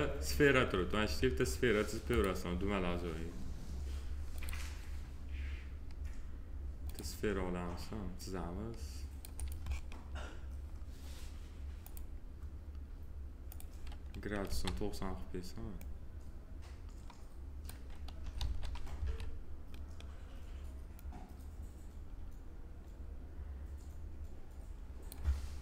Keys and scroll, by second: 14.4 e, 18.3 alt+x, 18.9 w.